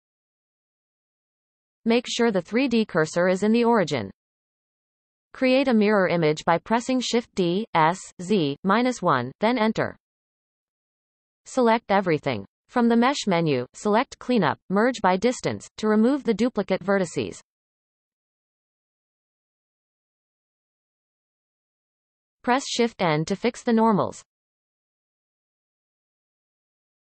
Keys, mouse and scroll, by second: 0.3 KP_1, 1.3 x, 3.0 a, 5.0 shift+d, 8.7 a, 9.1-11.4 middle drag, 11.4-14.5 drag, 20.2-20.6 scroll down 1, 20.6-22.6 middle drag, 22.6 shift+n.